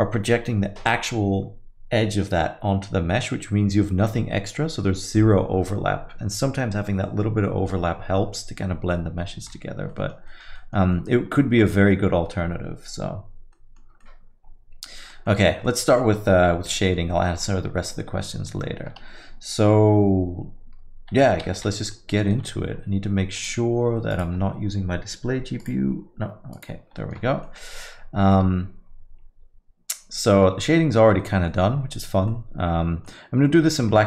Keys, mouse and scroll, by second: 9.9 alt+middle click, 10.3 middle click, 10.6 alt+middle click, 10.9 middle click, 11.3 scroll up 2, 11.7 alt+middle click, 13.6 middle click, 13.9 scroll down 1, 14.0 alt+middle click, 15.3 middle click, 15.5 scroll down 1, 15.7 alt+middle click, 16.8 middle click, 18.2 alt+middle click, 21.6 n, 21.7 middle click, 22.0 scroll down 1, 22.2 alt+middle click, 22.5 middle click, 23.4 click, 27.0 middle click, 27.2 scroll down 1, 27.5 alt+middle click, 27.7 middle click, 28.0 scroll up 2, 28.3 alt+middle click, 31.2 alt+middle click, 31.5 middle click, 32.3 middle click.